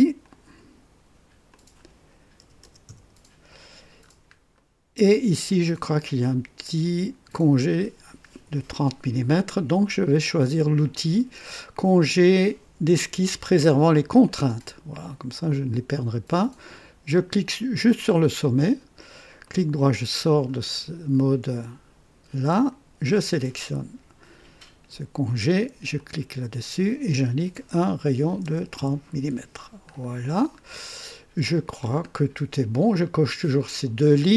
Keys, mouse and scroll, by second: 0.1 typing, 0.2 click, 1.5 click, 2.4 KP_6, 2.6 KP_0, 2.8 KP_Enter, 4.0 typing, 4.0-4.4 scroll up 1, 4.5 right click, 6.1 click, 7.6 click, 10.9 click, 14.2 click, 18.0 click, 19.4 right click, 20.3-20.6 scroll up 2, 22.7 click, 25.9 click, 28.1 KP_3, 28.4 KP_0, 28.7 KP_Enter, 29.9-30.6 scroll down 3, 30.5 typing, 30.8-31.6 right drag, 31.8 scroll down 1.